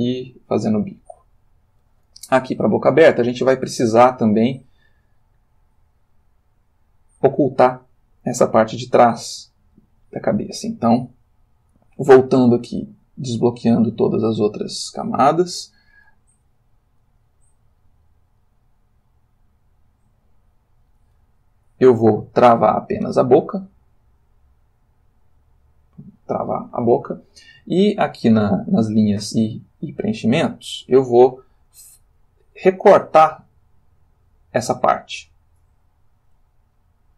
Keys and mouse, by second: 0.0 Right, 0.8 Left, 8.5-10.0 ctrl+middle drag, 13.0 click, 13.6-14.7 drag, 16.7 middle click, 17.2 ctrl+middle click, 18.4 ctrl+middle click, 19.7-21.1 drag, 23.7 click, 25.4 click, 26.0 click.